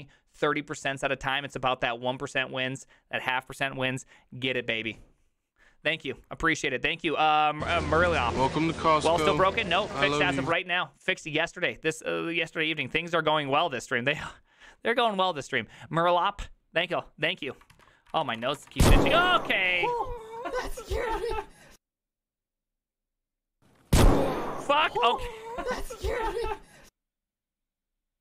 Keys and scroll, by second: 18.0-19.6 typing, 19.6 ctrl+:, 19.7 Return.